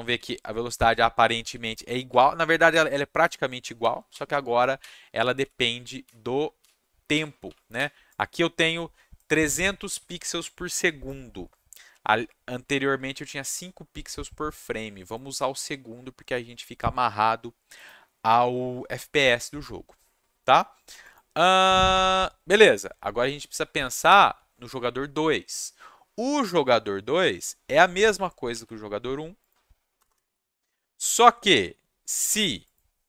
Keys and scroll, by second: 0.0-2.1 typing, 3.8-8.2 typing, 28.5 ctrl+c, 29.9 Return, 30.0 Return, 30.2 ctrl+v.